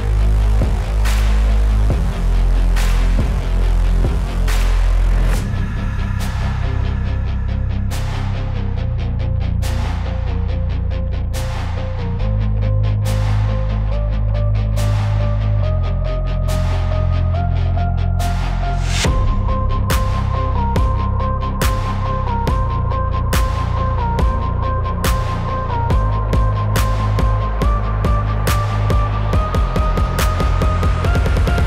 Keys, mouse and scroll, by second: 0.6 alt+b, 0.8 alt+click, 2.3 z, 3.4 x, 4.4-5.9 drag, 6.7 click, 8.5 ], 8.6 ], 8.7 ], 12.0 space, 12.1 click, 12.3 space, 13.4-14.9 typing, 14.4 click, 16.2-21.0 typing, 16.6 click, 16.9 click, 17.3 click, 17.5 click, 20.2 click, 20.7 click, 23.9-25.6 typing, 24.0 click, 24.2 click, 25.0 click, 25.7 click, 26.4 click, 27.5-28.5 typing, 27.6 click, 27.9 click, 28.3 click, 28.9 click.